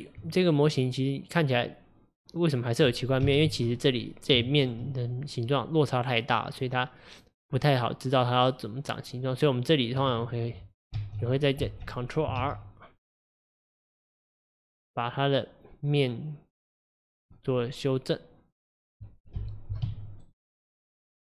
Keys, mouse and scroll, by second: 0.7-2.8 middle drag, 2.8-3.3 scroll up 1, 3.3 KP_1, 4.0-4.4 scroll up 3, 4.4-7.5 shift+middle drag, 9.2 click, 11.0 alt+z, 11.3 click, 11.7 alt+z, 12.4 ctrl+r, 17.4-19.4 middle drag, 19.4 KP_1, 19.9 a, 20.2-21.3 right drag.